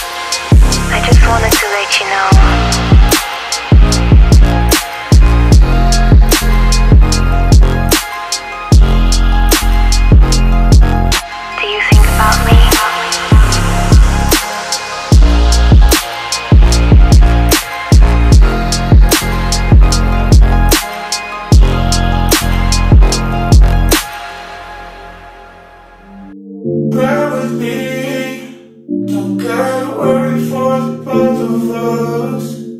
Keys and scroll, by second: 0.0 Tab, 0.5 ctrl+v, 3.7 Up, 7.3 Up, 8.5 space, 12.7 ctrl+g, 14.1 space, 14.5 r, 20.3 1, 20.4 0, 20.6 Return, 22.1 0, 22.2 Return, 26.5 ctrl+z.